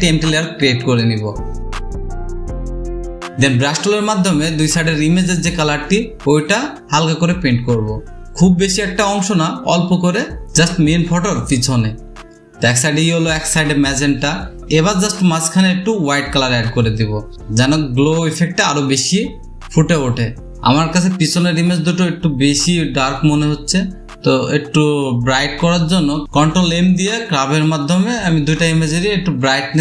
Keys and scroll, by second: 6.4-7.0 typing, 8.1-9.8 typing, 11.1 typing, 14.6 [, 16.2-17.8 typing, 19.1 ctrl+z, 20.5 ctrl+alt+space, 24.3 ctrl+m, 28.3 ctrl+m.